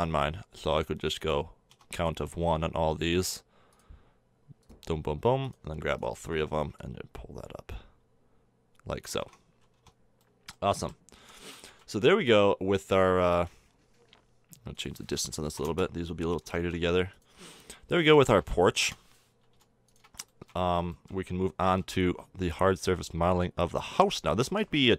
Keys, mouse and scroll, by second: 0.6 Tab, 1.7 Tab, 7.7 click, 8.7 middle click, 9.1 a, 9.2 Tab, 9.7 Tab, 10.2 click, 10.8 z, 11.1 z, 17.1 middle click, 20.2-21.5 middle drag, 21.5 right click, 21.6 g.